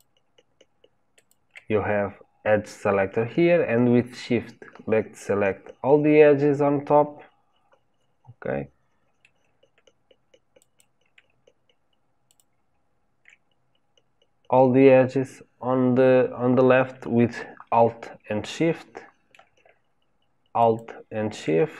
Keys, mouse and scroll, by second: 1.1 shift+click, 4.2-10.5 middle drag, 10.5 shift+click, 12.2 alt+shift+click, 13.6-15.2 scroll up 4, 15.2-16.1 scroll down 2, 18.4-20.5 middle drag, 20.5 alt+shift+click.